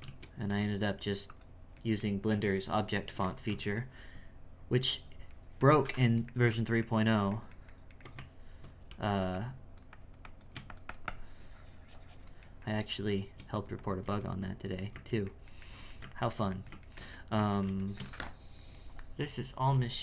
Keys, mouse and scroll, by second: 0.0 shift+s, 0.4 r, 1.9-8.1 shift+middle drag, 8.1 Tab, 9.3-12.5 drag, 12.5-13.5 shift+middle drag, 13.5-15.1 drag, 15.1-20.0 ctrl+middle drag.